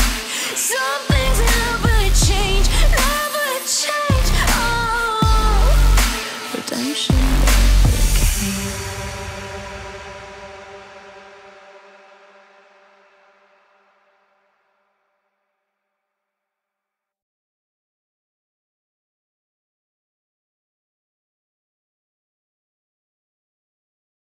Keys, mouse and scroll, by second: 0.5 c, 0.7 z, 1.0 c, 3.0-3.6 ctrl+z, 3.9 c, 4.3 c, 12.4 middle click, 14.6 z, 14.9 Tab, 15.3 click, 15.5 middle click, 19.7 shift+-, 20.3 Right, 21.0 Left, 21.4 Left, 23.9 KP_5, 24.2 KP_0.